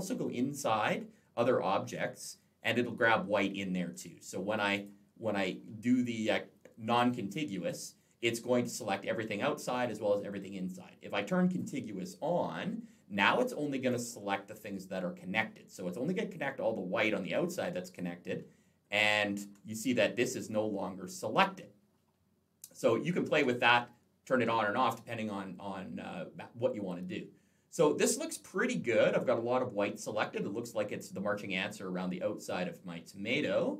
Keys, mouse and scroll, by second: 0.4-0.9 scroll up 1, 0.9-1.3 scroll up 1, 1.3 scroll down 2, 3.7 click, 4.6 click, 11.3 click, 13.0 click, 13.7 click, 18.3 alt+scroll up 1, 22.1 alt+scroll down 1, 24.7-25.0 scroll up 3, 25.0-25.5 scroll down 2, 25.5-26.0 scroll up 1, 26.0 alt+scroll down 1, 26.7 alt+scroll up 1, 29.6 alt+scroll down 1, 33.1 alt+middle click.